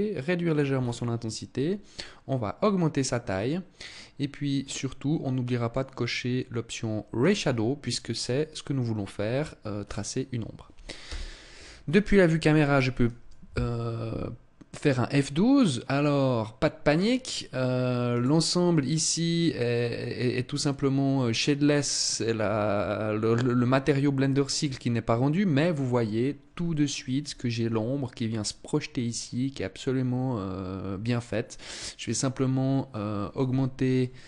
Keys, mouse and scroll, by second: 0.1-0.5 scroll down 6, 1.3 click, 3.9 middle click, 6.5 click, 9.1 right click, 10.3 KP_0, 32.8 Escape.